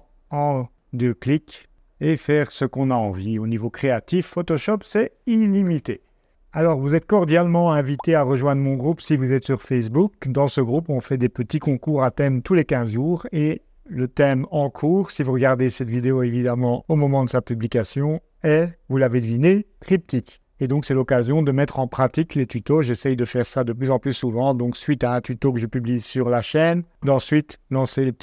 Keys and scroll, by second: 0.9 alt+BackSpace.